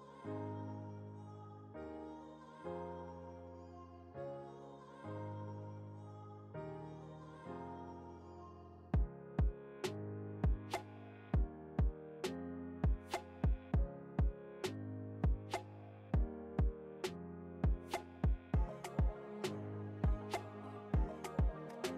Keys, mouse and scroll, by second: 2.1 typing, 2.3-5.8 drag, 5.8 ctrl+t, 6.7-15.9 alt+shift+drag, 15.9 Return, 17.8 alt+click, 18.8 ctrl+z, 20.8 click.